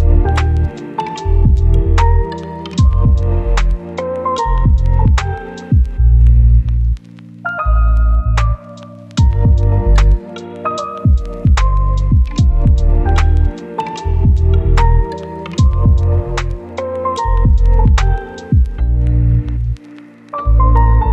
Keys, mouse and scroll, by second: 5.6 scroll down 1, 5.7 scroll up 1, 5.9 right click, 9.1 click, 9.3 scroll down 1, 9.5 right click, 14.7 click, 15.4 right click, 16.4-16.8 scroll up 1, 17.1 click, 17.2-17.7 scroll down 1, 17.7-18.3 scroll up 1, 18.3 click, 18.5-18.9 scroll up 1, 18.9 click, 19.2-19.8 scroll down 1, 19.8 right click.